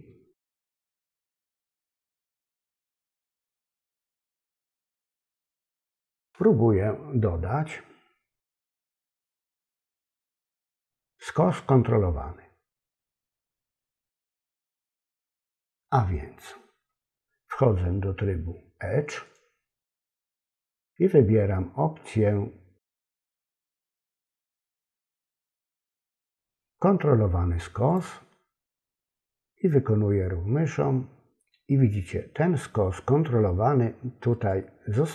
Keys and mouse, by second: 1.3 alt+shift+click, 2.6 alt+shift+click, 5.5 alt+shift+click, 19.2-34.5 drag.